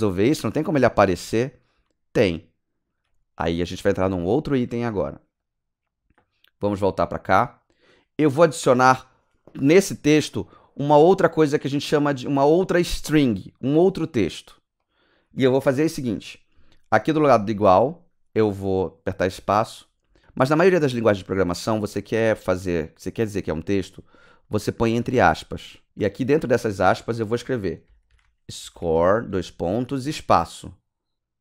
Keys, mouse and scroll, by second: 0.0-0.9 typing, 3.1 click, 7.1 click, 8.3 click, 8.8 click, 9.9 click, 14.8 click, 19.3 click, 24.6 shift+space, 26.1 Left, 27.8-30.0 typing.